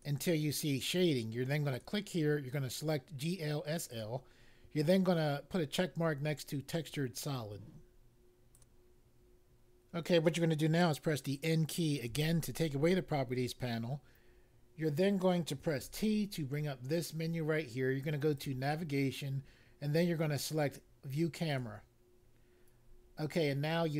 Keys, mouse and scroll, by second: 1.7 click, 3.8 click, 6.8 click, 8.5 click, 12.0 n, 15.8 t, 18.3 click, 21.5 click.